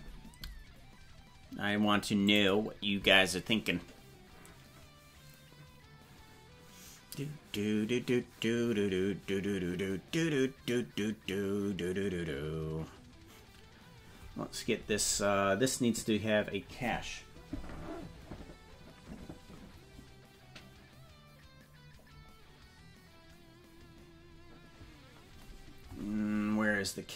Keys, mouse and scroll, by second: 25.9 scroll up 1.